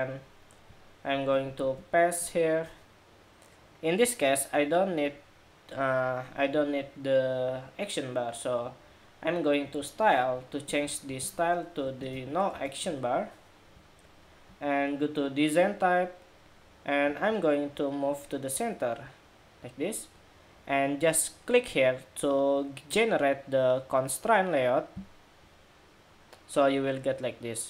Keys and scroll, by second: 1.3 super+v.